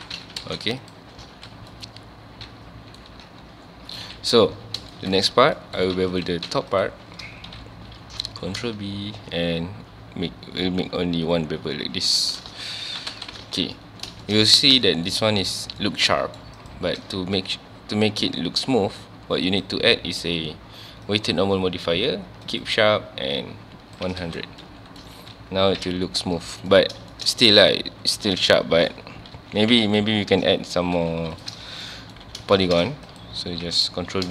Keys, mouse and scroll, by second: 0.1 Tab, 0.4 alt+a, 0.8 click, 1.3 ctrl+s, 1.5 scroll down 1, 1.7-3.1 middle drag, 3.1 Tab, 3.4-4.0 scroll up 1, 4.1 KP_1, 4.6 scroll down 1, 4.9-5.4 shift+scroll up 2, 4.9 shift+middle drag, 5.6 middle drag, 5.8 Tab, 5.9 3, 6.1 click, 6.5 Tab, 6.7 click, 7.5 KP_1, 8.0-8.4 scroll up 1, 8.4 ctrl+b, 12.2 shift+click, 12.5 alt+a, 12.8 Tab, 13.1 alt+a, 13.4 ctrl+s, 13.6 scroll down 1, 13.8-14.4 middle drag, 14.4 scroll up 1, 14.9 shift+middle click, 15.1 scroll up 1, 15.8-16.6 middle drag, 16.6 click, 19.5-22.6 drag, 23.4 click, 24.2 alt+a, 24.4 scroll down 1, 24.6-25.2 middle drag, 25.2 ctrl+s, 25.8 KP_1, 26.3-26.7 scroll up 1, 26.7-27.3 middle drag, 27.3 scroll up 1, 27.8 Tab, 28.6 2, 29.0 3, 29.4 2, 29.9 alt+click, 30.5 ctrl+x, 31.1 2, 31.3 click, 31.8 middle click, 32.2 ctrl+b, 32.8 right click, 33.1 alt+click, 34.1 ctrl+b.